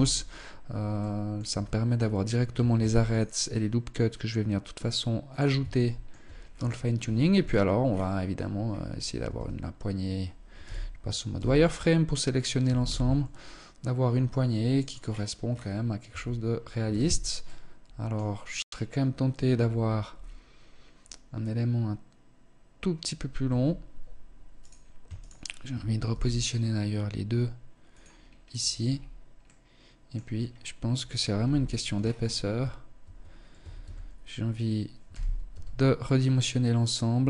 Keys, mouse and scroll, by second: 0.4 middle click, 0.9 Tab, 1.4-2.0 scroll up 1, 2.0 scroll up 1, 2.2 ctrl+r, 5.1 shift+middle click, 5.8 scroll down 4, 6.8 KP_1, 7.3-7.7 scroll down 2, 7.7-8.3 scroll up 6, 8.7 a, 10.1 z, 10.8 b, 12.1 g, 14.4-15.3 scroll down 8, 15.3 Tab, 16.3 z, 16.9 middle click, 22.8 KP_1, 24.0 right click, 24.6 shift+right click, 25.4 g, 27.6 scroll down 1, 28.2-28.8 scroll down 4, 28.8 middle click, 29.6-29.9 scroll up 4, 30.7 KP_1, 31.3-31.8 scroll up 2, 31.8 a, 32.3 Tab, 32.9 a, 33.1 a, 34.4 z, 34.9 s.